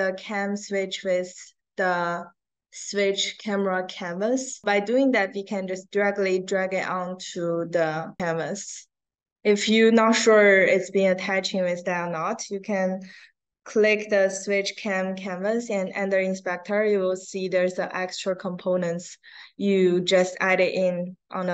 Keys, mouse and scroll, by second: 5.0-9.1 drag, 9.4 click, 10.7-11.1 scroll down 4, 16.4 middle click.